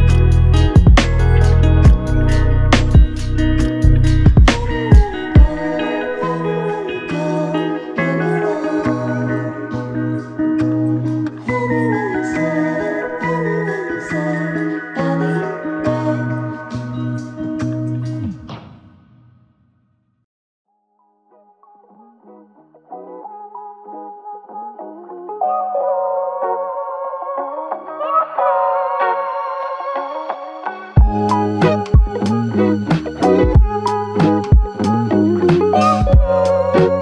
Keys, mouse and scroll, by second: 0.1 double click, 0.8 alt+click, 6.0 alt+click, 10.8 alt+click, 17.6 alt+click, 18.5 alt+click, 20.6 typing, 21.8 double click, 31.0 shift+click, 33.9 shift+click, 34.2 double click, 35.1 alt+click, 36.2 ctrl+alt+click.